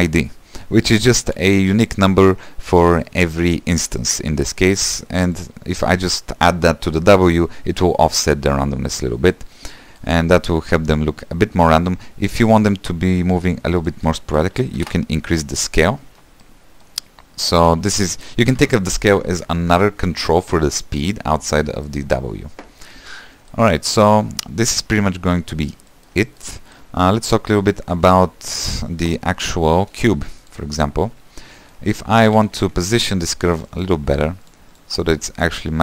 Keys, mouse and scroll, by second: 1.0 shift+a, 9.2 click, 9.9 middle click, 10.4 space, 13.9-16.5 drag, 16.5-18.0 middle drag, 18.0-20.1 drag, 20.1-20.4 scroll down 2, 20.4-22.6 shift+middle drag, 22.6-23.2 scroll up 1, 23.2-27.1 middle drag, 27.1-28.7 scroll down 4, 29.1 space, 29.9 space, 30.5 click, 31.4-31.7 scroll down 3, 31.7 shift+middle click, 32.6 Tab, 33.4 click, 33.6 scroll down 3, 33.8 middle click, 34.1 g, 34.9 click, 35.1 middle click, 35.4 g.